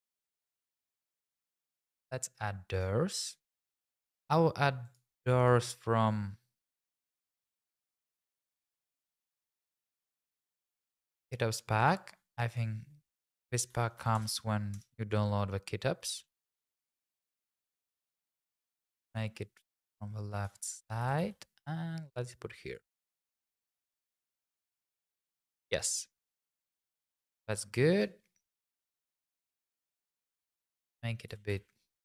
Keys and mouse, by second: 1.1 click, 2.7 click, 3.9-4.9 drag, 5.4 click, 6.0 click, 6.7-8.4 drag, 9.1 click, 10.3 click, 11.8 click, 12.5 click, 13.7 r, 14.0 x, 14.1 KP_9, 14.2 KP_0, 14.7 Return, 16.1 g, 16.5 shift+z, 21.0 g, 21.2 y, 22.7 click, 24.1 click, 25.1 x, 29.5 click, 29.9 Tab, 30.7 click, 31.3 g, 31.5 x.